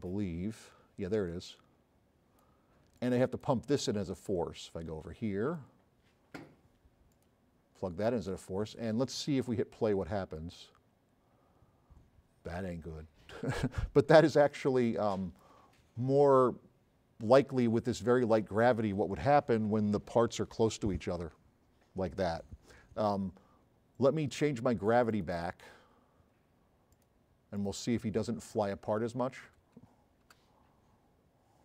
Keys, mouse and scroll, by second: 1.5 click, 10.4 click, 14.1 s, 14.8-15.4 right drag, 26.9 click, 27.6 click, 28.1 click, 28.9 Left, 29.5 BackSpace, 30.3 Return.